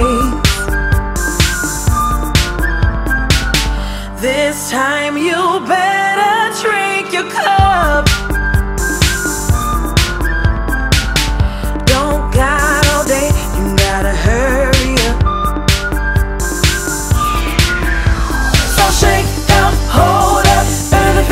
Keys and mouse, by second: 0.8 click, 3.1 click, 6.2 click, 9.3 click, 10.5 click, 10.6 click, 12.1 click, 12.2 click, 14.7 click, 15.9 click.